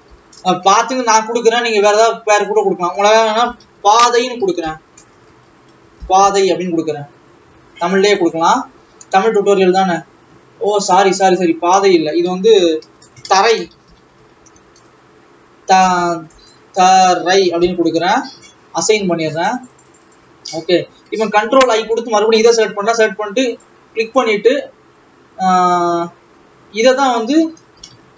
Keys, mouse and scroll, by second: 0.3 BackSpace, 2.3 click, 2.5-7.8 drag, 7.8 BackSpace, 8.3 click, 8.8-10.5 scroll up 2, 11.1 click, 11.2-19.3 drag, 19.6 click, 20.5-21.0 scroll down 2, 21.4 ctrl+i, 24.1 click.